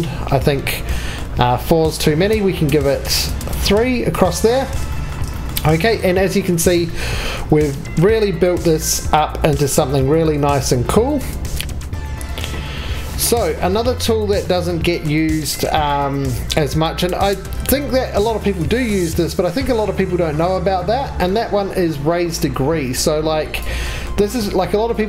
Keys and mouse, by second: 16.6 3, 18.6 shift+s, 19.6 shift+s.